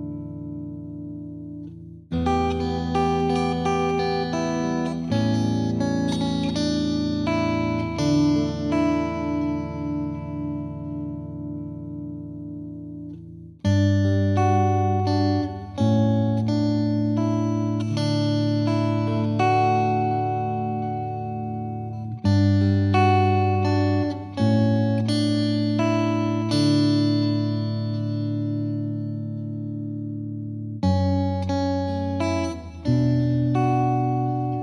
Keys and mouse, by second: 3.5 click, 6.9 click, 9.2 click, 14.2 click, 14.6 click, 15.8 click, 17.3 click, 21.1 click, 24.0 click, 26.8 click, 29.4 click, 34.0 click.